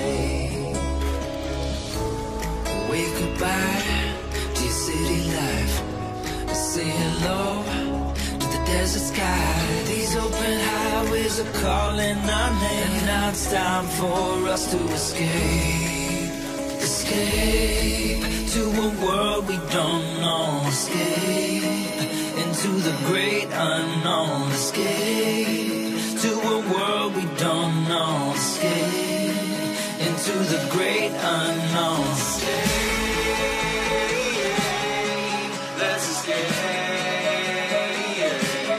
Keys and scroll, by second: 19.4 Return, 20.2 Return.